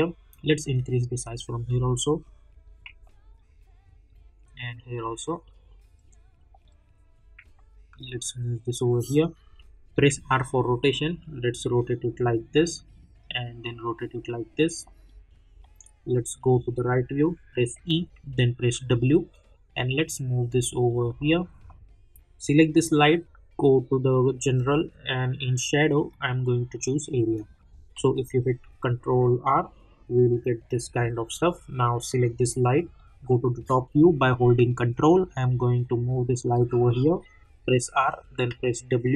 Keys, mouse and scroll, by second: 0.7 click, 1.6 middle click, 2.4 scroll down 1, 3.0 alt+middle click, 4.1-6.5 drag, 6.5 middle click, 6.9-7.4 scroll down 1, 7.5 alt+middle click, 8.3-9.9 drag, 9.9 r, 10.9-14.8 drag, 14.8 scroll down 1, 14.8 middle click, 16.5 scroll down 1, 17.6 e, 18.6 w, 19.3-21.2 drag, 21.2 middle click, 23.0 click, 27.9 ctrl+r, 32.0 click, 32.7 middle click, 35.0-37.4 ctrl+drag, 37.4-38.9 typing.